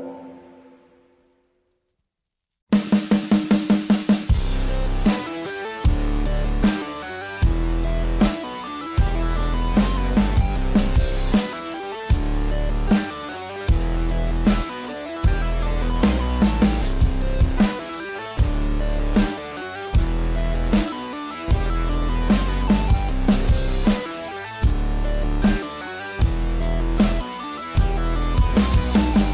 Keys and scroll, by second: 18.7 space, 24.0 space.